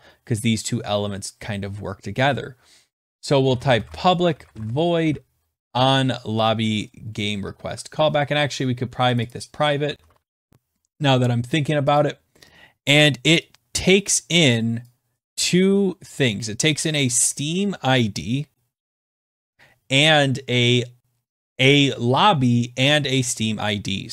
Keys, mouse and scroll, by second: 3.2-5.0 typing, 7.0-7.8 typing, 9.1 click, 9.3 click, 9.6-10.8 typing, 11.9 click, 14.7 click, 16.9 click, 19.3 click.